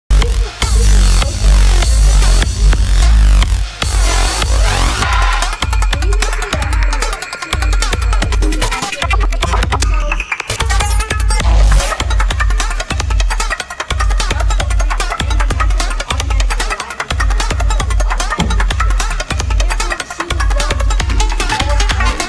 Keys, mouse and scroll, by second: 12.9-20.7 alt+drag.